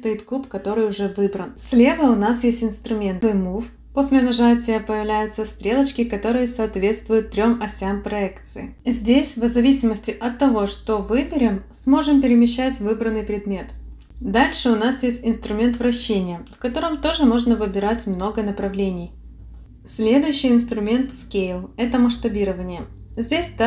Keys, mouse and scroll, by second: 3.9 click, 8.9 click, 11.8 click, 13.6 click, 14.8 click, 16.2 click, 18.7 click, 19.7 click, 22.5 click.